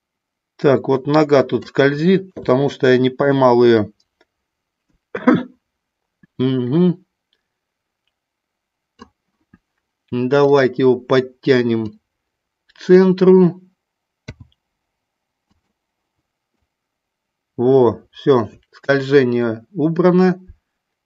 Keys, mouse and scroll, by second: 2.3 KP_3, 3.7-9.0 drag, 10.4 click, 11.8-13.1 drag, 14.3 i, 16.6-21.0 drag.